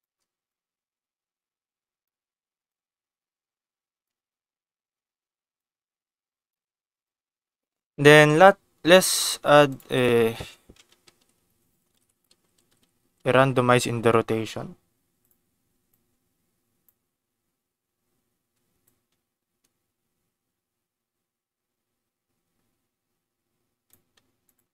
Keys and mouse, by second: 0.5-2.0 drag, 2.6-4.0 shift+drag, 5.5 shift+click, 9.6-15.2 drag, 12.8 t, 16.0 click, 18.8-24.0 drag, 24.4 click.